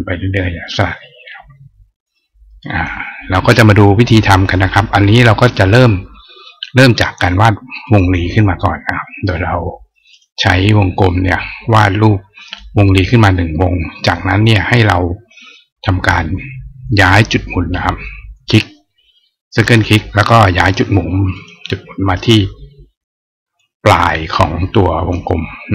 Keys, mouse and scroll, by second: 2.3 right click, 6.7 right click, 7.7 click, 9.9 click, 10.8-12.3 drag, 18.2 click, 19.4 click, 21.1 click, 22.0 click, 23.4-24.9 drag.